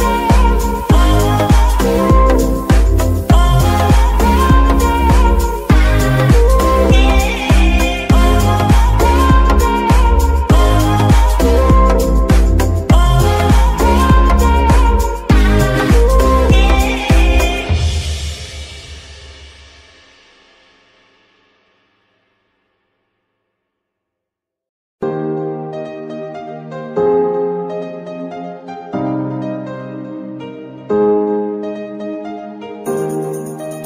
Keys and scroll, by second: 0.8 g, 2.3 Escape, 4.5 r, 10.2 Escape, 17.7 g, 21.1 g, 23.6 Escape.